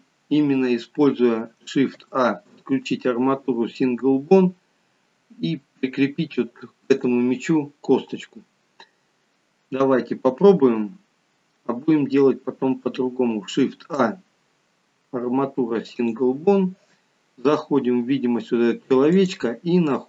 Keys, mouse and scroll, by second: 0.2 scroll down 1, 2.0 shift+a, 13.9 shift+a, 19.2 click.